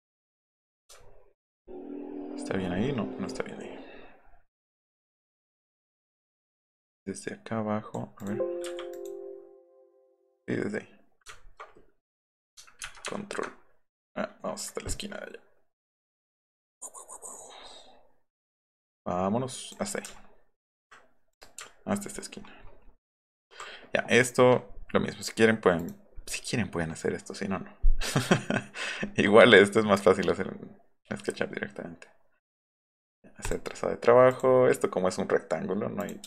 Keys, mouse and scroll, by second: 1.0-3.0 alt+scroll up 10, 3.0 alt+middle click, 3.3 alt+middle click, 3.7 alt+middle click, 4.0 alt+middle click, 4.2-4.6 alt+scroll up 2, 4.8 alt+scroll down 1, 5.1 alt+scroll up 1, 5.6 click, 6.6-7.9 drag, 8.2 click, 8.6 Escape, 8.9 click, 9.6 click, 11.4 alt+right click, 21.3 click, 21.7-22.5 alt+scroll down 4, 25.8 click, 25.8 right click, 33.5 click, 34.3 click, 36.0 click.